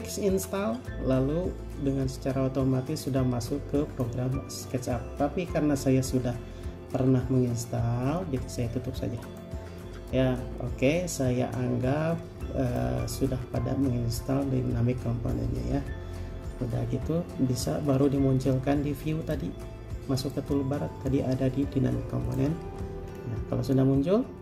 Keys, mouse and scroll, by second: 11.3 scroll up 1, 23.2-23.7 scroll up 1.